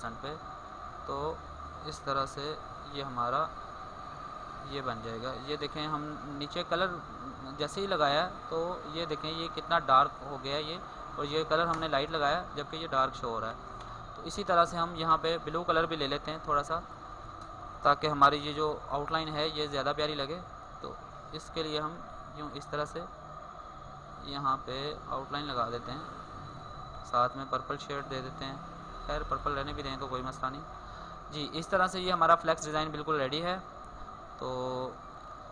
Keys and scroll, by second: 1.8 ctrl+t, 18.3 ctrl+shift+n, 20.6 ctrl+t.